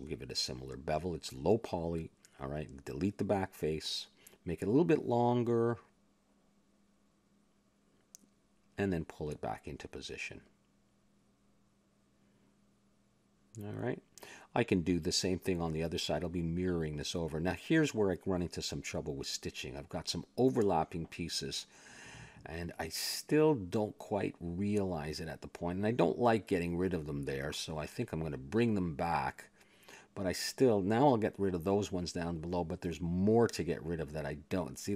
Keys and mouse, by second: 0.0-1.1 middle drag, 1.1 a, 2.3-3.6 drag, 3.2 middle click, 3.7 Tab, 4.3 click, 4.8 x, 5.4 Tab, 6.5 click, 7.4 shift+s, 7.9 click, 8.5 Tab, 9.0 a, 9.8 s, 11.0 a, 11.2 Tab, 11.8-13.6 drag, 14.2 a, 14.3-15.4 middle drag, 15.6 middle click, 17.8 click, 18.1 Tab, 18.8 click, 20.6 ctrl+l, 21.1 x, 22.0 Tab, 23.0 a, 23.1-24.5 middle drag, 26.3-28.5 middle drag, 28.5 ctrl+z, 29.2 ctrl+z, 29.8 a, 30.3 click, 30.6 Tab, 31.0 click, 31.2 click, 31.6 click, 32.6 ctrl+l, 33.0 x, 34.5 Tab.